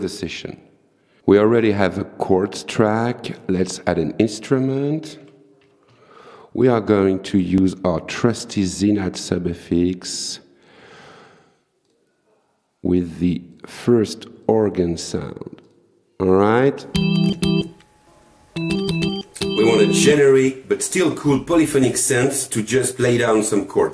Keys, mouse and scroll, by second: 2.9 right click, 3.6 click, 5.0-6.4 typing, 7.4 click, 9.4 click, 10.7 click, 11.9 click, 13.6 click, 14.5 click, 15.7 click.